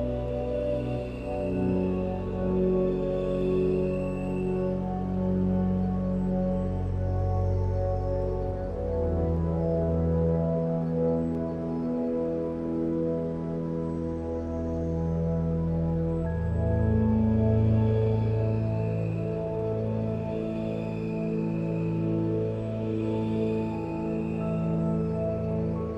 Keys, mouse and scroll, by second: 1.9 Tab, 3.3 Tab, 8.0 g, 11.5 g, 14.1 Delete, 20.7 g, 25.6 g.